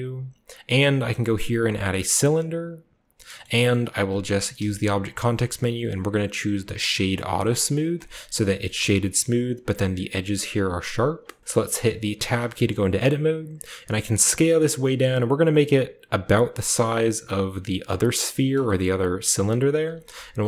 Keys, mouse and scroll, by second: 2.1 click, 3.3 shift+middle click, 3.6 shift+middle drag, 3.7-4.5 scroll up 2, 4.5 scroll up 1, 4.5 w, 7.9 click, 8.7 click, 8.8-9.3 scroll up 2, 8.8-9.2 middle drag, 9.3 scroll down 2, 9.3-10.9 scroll up 2, 10.9 scroll down 2, 11.3 shift+middle click, 11.4-13.6 scroll up 2, 11.4-12.3 middle drag, 12.1 Tab, 12.6 middle click, 13.6-14.2 scroll up 1, 13.8 s, 17.8 click, 18.6-19.7 shift+scroll up 2, 19.7 s, 20.0 z.